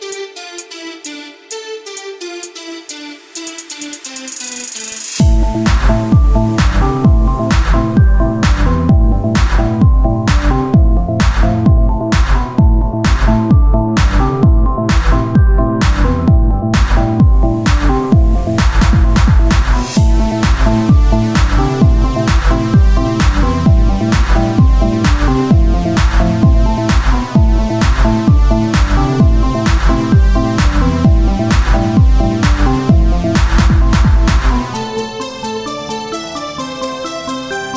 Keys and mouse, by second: 1.3-4.6 drag, 4.6 z, 5.8 z, 5.8 c, 6.9 z, 7.8 r, 11.1 Tab, 11.1 r, 15.3 Tab, 15.6 a, 16.3 ctrl+n, 16.3 a, 16.6 Tab, 18.7 Tab, 20.5-21.7 drag, 21.7 o, 22.0 s, 24.4-29.0 drag, 25.6-28.1 right drag, 29.0 Tab, 30.9 Tab, 32.3-36.4 drag, 32.7-36.2 right drag, 36.3 Tab, 37.6 Tab, 37.6-37.7 right drag.